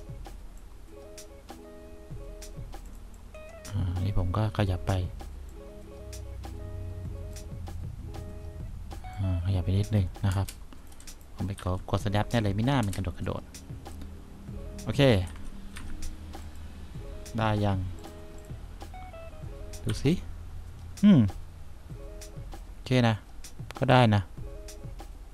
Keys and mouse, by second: 11.2 click, 11.7 1, 15.4 F2, 15.9 F1, 20.0 3, 20.1 click, 21.3-23.6 drag.